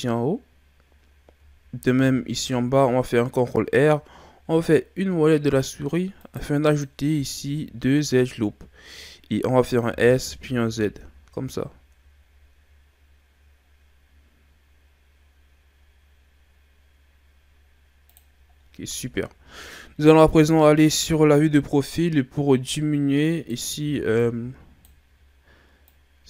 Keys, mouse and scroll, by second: 2.0 ctrl+r, 7.3 shift+scroll down 4, 7.7-9.9 scroll up 2, 9.9 s, 18.6 scroll down 1, 19.0-20.3 shift+scroll up 1, 20.3 KP_3, 23.3 right click, 23.8 b, 25.8 click.